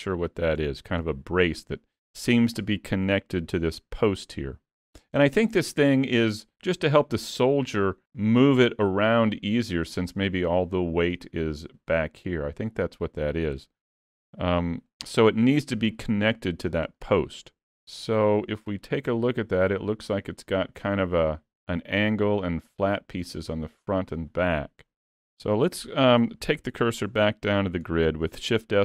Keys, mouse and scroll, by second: 0.3-0.6 scroll down 2, 0.6 shift+middle click, 1.1 middle click, 2.4 middle click, 5.5 scroll down 2, 5.8 shift+middle click, 14.0 middle click, 17.0 middle click, 18.0 scroll up 3, 18.3 middle click, 18.8-19.2 scroll up 1, 19.2 middle click, 25.2-25.6 scroll down 4, 25.6 shift+middle click, 26.5 shift+s, 27.3 shift+middle click, 27.9 scroll down 2.